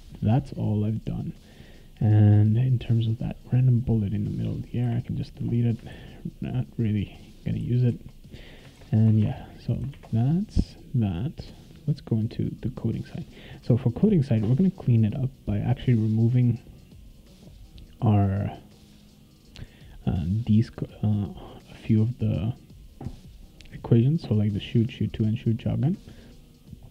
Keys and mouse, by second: 2.5 right click, 4.4 click, 5.9 ctrl+s, 6.4 right click, 7.1-8.6 right drag, 7.6 s, 7.9 e, 8.8 ctrl+s, 9.2 alt+Tab, 9.9 alt+Tab, 12.5 click, 16.8 click, 17.4 click, 18.2-19.6 drag, 19.9 click.